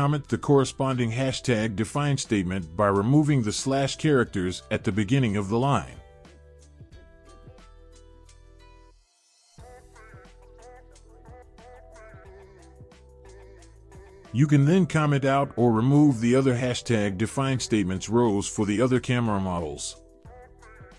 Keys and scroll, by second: 7.7 Right, 8.3 BackSpace, 8.7 BackSpace, 13.1-13.4 typing.